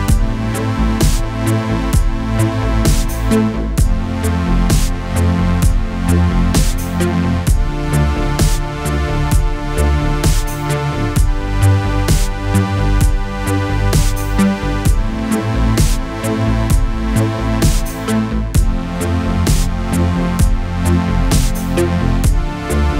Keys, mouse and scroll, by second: 0.7-1.3 alt+click, 10.2 ctrl+d, 10.5-12.2 click, 13.0-14.1 alt+click, 19.9-20.5 alt+click.